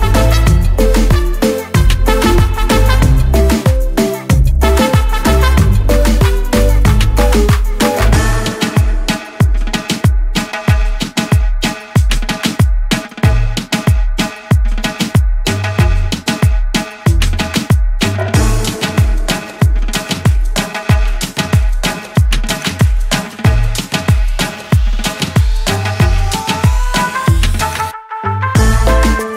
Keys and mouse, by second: 0.3 click, 0.4 click, 1.4 click, 3.4 click, 3.5 click, 4.9 click, 8.7 click, 9.5 click, 15.3 click, 17.7 ctrl+d, 18.9 click, 22.2 click, 23.7 click, 25.8 click.